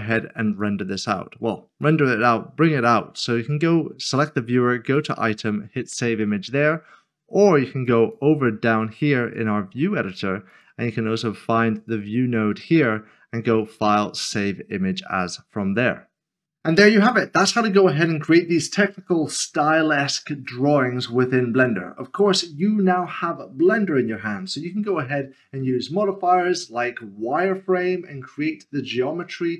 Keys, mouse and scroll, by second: 0.6 click, 5.0 click, 7.9 click.